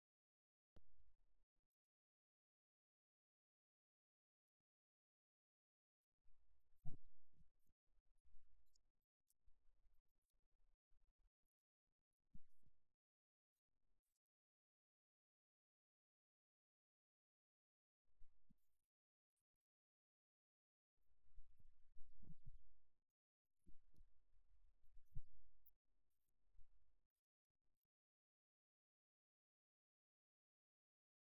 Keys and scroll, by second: 4.5 super+z.